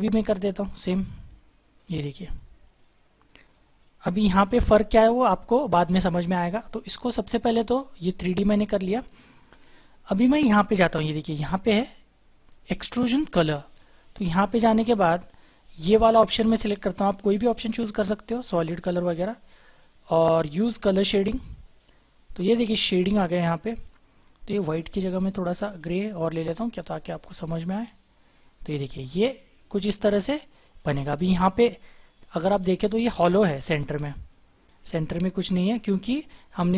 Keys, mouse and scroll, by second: 0.4 double click, 29.1 double click, 30.3-30.8 scroll up 1, 30.8-31.9 scroll down 1.